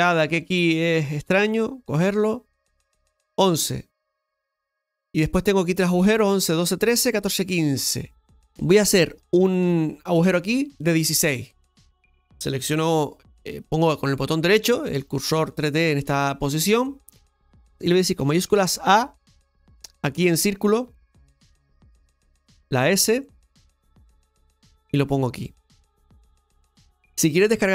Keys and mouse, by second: 2.9-4.0 shift+middle drag, 11.0 click, 17.1 shift+middle click, 18.6 shift+a, 23.9 s.